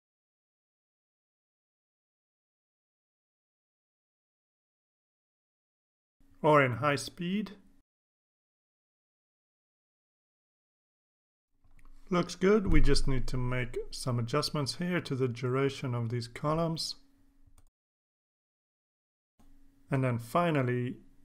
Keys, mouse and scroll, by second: 5.7 click, 6.7 click, 7.4 KP_2, 7.5 KP_4, 7.7 KP_Enter, 8.3 click, 9.2 click, 14.1-14.4 scroll down 2, 15.4 click, 16.2-17.1 drag, 17.3 click, 18.2 click, 18.6 shift+click, 19.1 Delete, 19.6 ctrl+s.